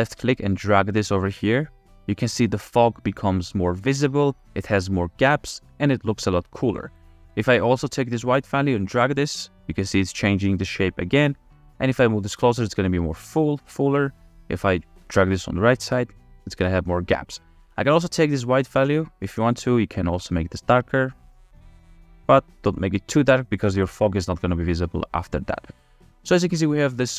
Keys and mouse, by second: 7.3-8.9 middle drag, 8.9-12.0 drag, 17.1 click, 20.1 click.